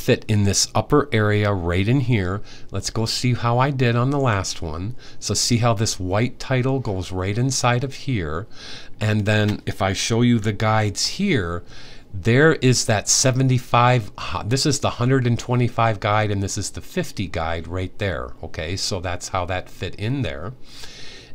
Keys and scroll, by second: 10.5 super+;.